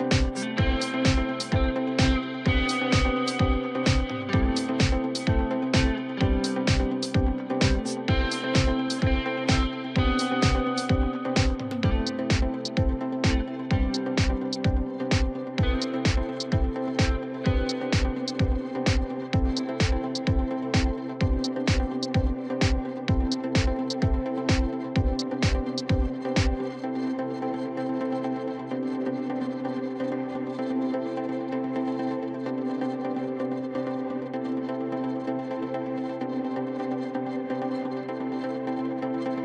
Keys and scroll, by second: 6.0 ctrl+t, 13.1 ctrl+t.